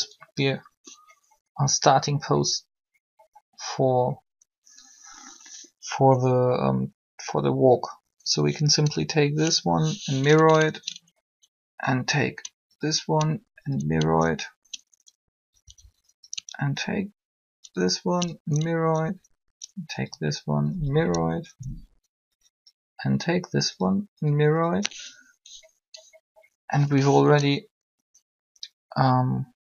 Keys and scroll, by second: 15.2 Right, 19.0 Up.